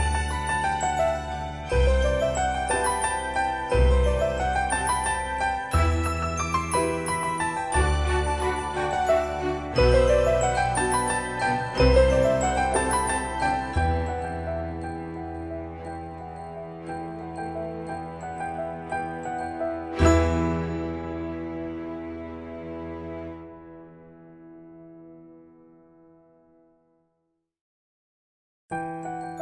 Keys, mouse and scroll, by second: 0.4 middle click, 2.7 typing, 5.9 typing, 5.9 click, 9.7 typing, 17.7 click, 21.8 1, 24.8 click.